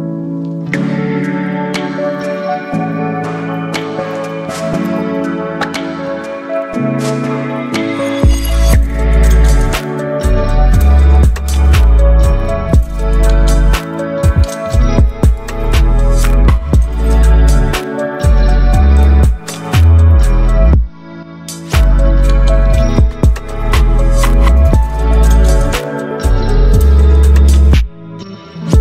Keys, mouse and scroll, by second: 1.9 click, 3.9-10.8 shift+drag, 12.5 ctrl+0, 15.0 click, 16.4 ctrl+t, 18.7-28.8 drag.